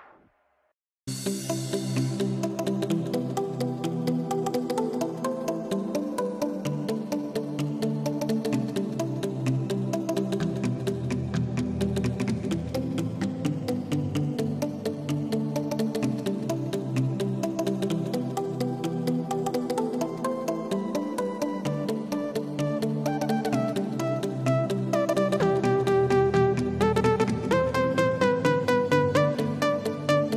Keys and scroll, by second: 0.2 alt+super+z, 0.9 alt+super+z, 1.2 alt+super+z, 1.4 alt+super+z, 10.4 super+z, 10.8 super+z, 11.2 super+z, 11.6 super+z, 12.0 super+z, 12.4 super+z, 13.1 super+z, 14.5 x, 19.3 super+-, 19.5 super+-, 19.8 super+-, 22.3 super+=.